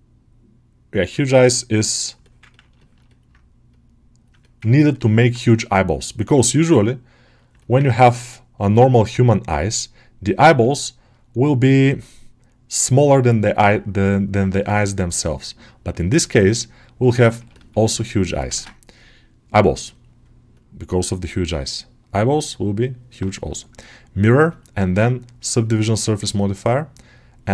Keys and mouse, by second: 1.8 alt+middle click, 2.4 ctrl+alt+middle click, 2.6 shift+middle click, 2.9 middle click, 4.3 alt+middle click, 4.5 ctrl+middle click, 4.8 alt+middle click, 7.4 middle click, 7.7 ctrl+middle click, 8.0 middle click, 10.5-11.8 alt+middle drag, 14.6-16.9 alt+middle drag, 17.0 ctrl+middle click, 17.4 ctrl+alt+middle click, 18.3 ctrl+space, 20.4-23.6 drag.